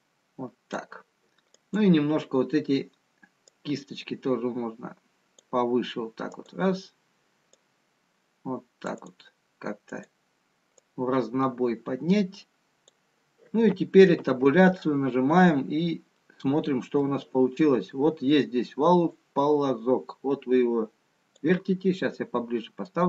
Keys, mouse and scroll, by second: 0.8 click, 2.5 click, 3.9 click, 10.1 click, 12.4 click, 14.7 Tab, 16.7 middle click, 16.7-18.9 scroll down 4, 19.5 click, 22.7-23.0 scroll down 2.